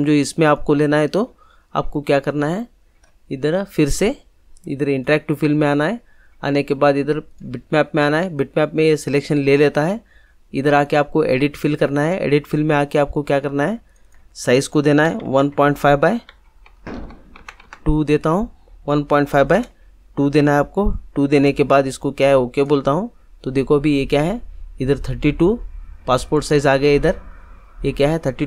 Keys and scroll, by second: 15.0 1, 15.2 ., 15.5 5, 16.1 Tab, 19.3 shift+Tab, 20.3 2.